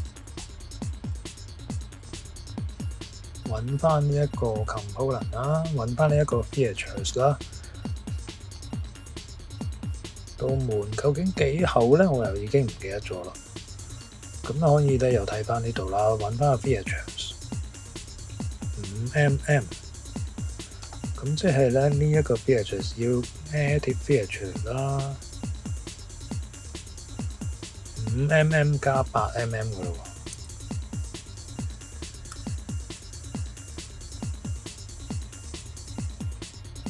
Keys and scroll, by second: 8.6-9.4 typing, 11.0 typing, 17.9 typing, 19.3 Escape, 21.2-21.9 typing, 30.3 Left, 32.3 5, 33.8 shift+=, 35.8 Return.